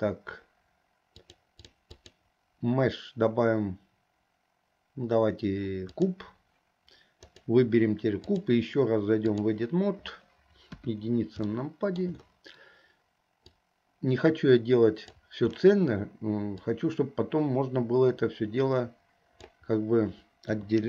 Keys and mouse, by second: 2.0-6.3 drag, 7.3 click, 8.3-9.6 drag, 10.8 KP_1, 11.7 shift+middle click, 13.6-15.3 drag, 16.8-19.6 drag, 20.6 KP_3.